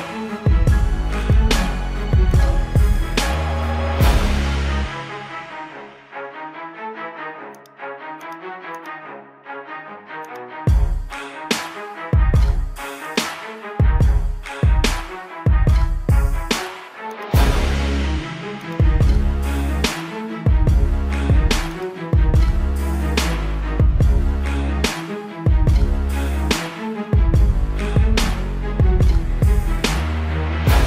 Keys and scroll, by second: 1.6 ctrl+=, 2.7 ], 7.2 ctrl+-, 8.5 ], 14.3 space, 22.8 ctrl+alt+z, 23.1 ctrl+-.